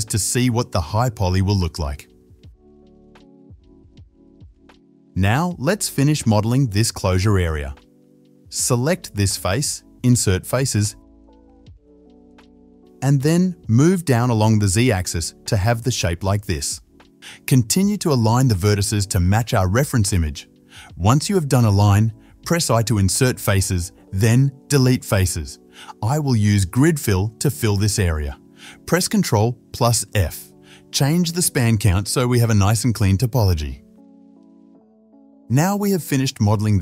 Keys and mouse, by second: 1.5-4.1 middle drag, 4.1 click, 4.1-4.7 middle drag, 4.7 KP_7, 5.5 click, 5.9 Tab, 6.7 shift+z, 7.4 3, 7.9 click, 9.0-11.4 middle drag, 9.6 |, 11.4-17.8 drag, 13.7 shift+z, 17.4 KP_7, 17.6 shift+z, 17.8 middle click, 18.1-19.9 drag, 19.7 1, 19.9-21.5 shift+middle drag, 21.5-24.2 shift+drag, 23.3 i, 24.2-27.6 middle drag, 24.5 3, 25.2 x, 27.0 2, 27.6 click, 27.7 shift+middle click, 27.9 shift+click, 28.0 alt+shift+middle click, 28.1 click, 28.2-33.2 middle drag, 29.8 ctrl+f, 33.2-36.8 drag.